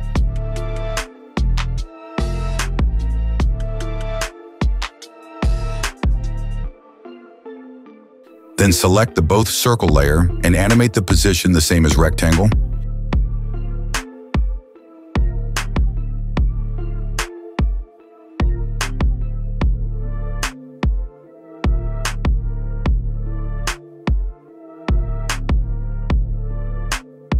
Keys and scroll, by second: 1.3 space, 2.8 space, 12.0 p.